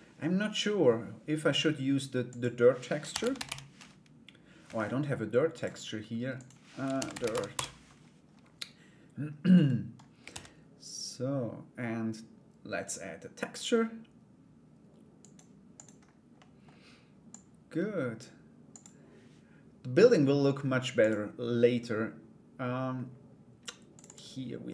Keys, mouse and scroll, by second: 1.9-4.5 drag, 6.0-7.4 drag, 9.2 middle click, 9.9 shift+a, 16.1 middle click, 17.0 click, 18.3 click, 24.3 middle click.